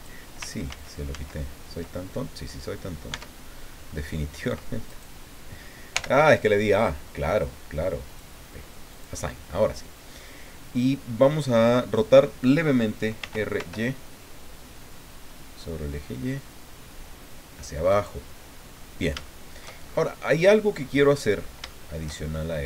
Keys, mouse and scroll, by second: 0.7 ctrl+z, 3.1 Tab, 3.6-4.1 scroll up 2, 4.9 right click, 5.9 l, 8.1 click, 8.9 click, 13.2 r, 13.6 y, 17.9 click, 18.7-19.5 scroll up 4, 19.2 shift+middle click, 19.8-20.1 shift+scroll up 2, 20.9 middle click, 22.2-22.6 shift+scroll up 3.